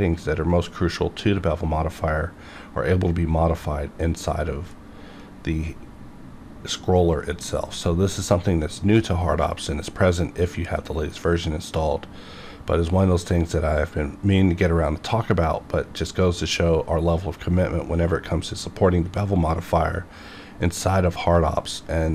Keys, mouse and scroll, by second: 4.7-6.0 scroll down 1, 6.0-7.0 scroll up 1, 7.7-8.9 scroll down 1, 8.9-9.5 scroll up 1, 9.5-11.7 scroll down 1, 11.9 scroll up 1, 17.3-17.6 scroll up 1.